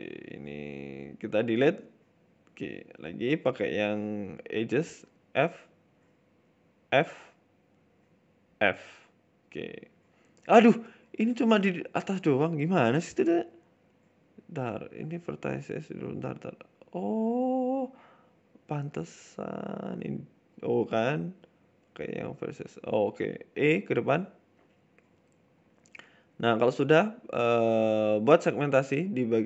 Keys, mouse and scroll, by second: 1.0 Delete, 1.0 shift+right click, 1.5 Delete, 2.2 middle click, 3.6 click, 4.0 right click, 4.4 shift+right click, 5.0 f, 5.2 middle click, 5.6 right click, 5.8 shift+right click, 6.2 ctrl+z, 6.3 shift+right click, 7.6 f, 7.9 right click, 8.2 shift+right click, 8.5 alt+shift+right click, 9.0 f, 9.2 middle click, 9.3 Tab, 9.4 scroll down 3, 9.6 middle click, 9.9 middle click, 10.7 KP_7, 11.1 middle click, 11.4 scroll up 2, 11.6 middle click, 11.8 Tab, 12.0 middle click, 12.3 right click, 12.8 right click, 13.3 Delete, 14.4 right click, 14.8 Delete, 16.1 click, 16.6 right click, 17.2 right click, 20.2 e, 20.9 Delete, 22.6 middle click, 23.0 right click, 23.2 middle click, 24.0 KP_7, 24.6 e, 26.5 middle click, 27.1 middle click, 28.2 right click, 28.8 shift+right click.